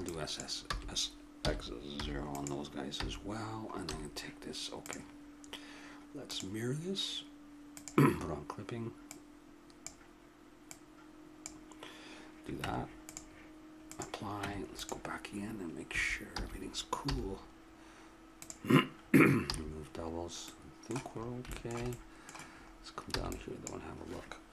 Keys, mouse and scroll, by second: 0.6 s, 2.9 a, 3.8 a, 4.8-7.1 drag, 7.1 middle click, 7.7-10.9 drag, 12.6 Tab, 14.4 Tab, 15.4 middle click, 15.9 a, 16.3 a, 16.7 middle click, 17.1 w, 19.5 a, 23.1 b.